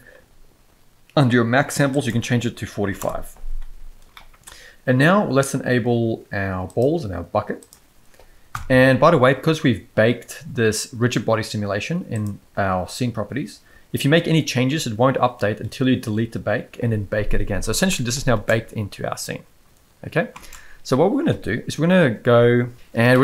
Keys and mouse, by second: 1.9-3.0 drag, 4.1 middle click, 6.7 click, 7.6 click, 8.5 KP_1, 17.9 middle click, 18.4 space, 20.3 space, 23.1-23.2 middle drag.